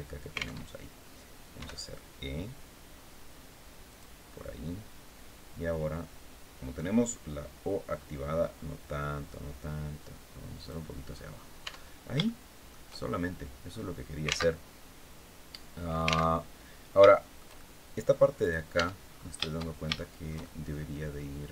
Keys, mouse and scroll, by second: 0.3 alt+Tab, 1.2 e, 3.6 click, 6.8 click, 7.5-7.9 scroll up 1, 8.1-8.8 scroll up 1, 9.2 scroll up 1, 10.8 scroll down 1, 11.3 Tab, 11.9 shift+middle click, 12.6 shift+scroll down 2, 13.4 scroll up 2, 14.2 alt+Tab, 16.1 alt+Tab, 16.8 shift+middle click, 17.6 middle click, 18.1 right click, 18.4 Tab, 18.7-19.1 scroll up 1, 19.7-20.8 shift+middle drag.